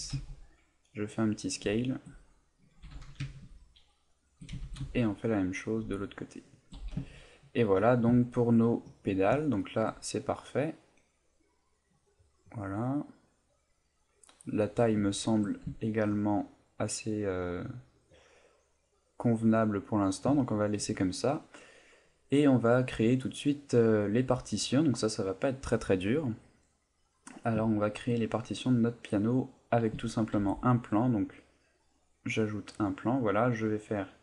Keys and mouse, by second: 1.1 click, 1.7 shift+middle click, 2.8 g, 4.3 shift+click, 4.6 shift+d, 6.6 shift+click, 6.7 a, 7.0 ctrl+middle click, 7.8 ctrl+middle click, 8.2 ctrl+middle click, 9.1 middle click, 9.5 shift+middle click, 9.8 shift+middle click, 10.0 middle click, 14.6 middle click, 15.1 shift+middle click, 15.7 ctrl+middle click, 16.2 middle click, 20.4 shift+middle click, 21.8 middle click, 22.9 middle click, 27.8 shift+middle click, 30.4 shift+a, 32.6 middle click.